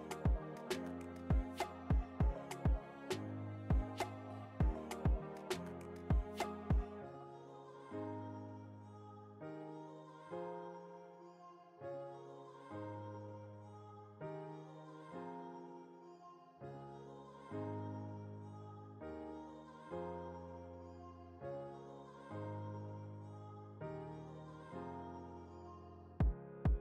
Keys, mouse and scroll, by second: 0.2-3.6 drag, 0.2 typing, 3.6 t, 4.2-6.5 drag, 6.5-8.5 alt+shift+drag, 8.5 Return, 9.1 click, 9.6 alt+scroll down 1, 10.5 alt+scroll up 1, 11.0 click, 11.1 click, 11.8 ctrl+s, 15.1 shift+Num_Lock, 15.3 shift+F12, 16.3 click, 16.3 typing, 20.8 Return, 22.6 alt+scroll up 1, 23.6 ctrl+t, 24.8-26.8 drag.